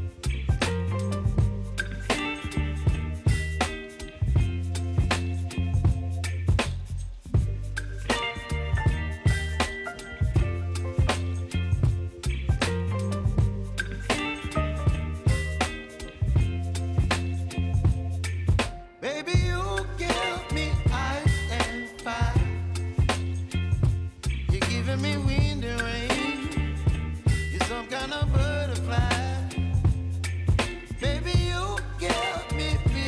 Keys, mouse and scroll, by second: 1.8 scroll down 1, 3.5 click, 11.9 click, 12.8-18.1 shift+drag, 19.8-20.5 typing, 21.6 click, 23.1 ctrl+d, 24.0 p, 25.0-27.6 drag, 27.6 Left, 29.0 v, 29.7-33.0 drag.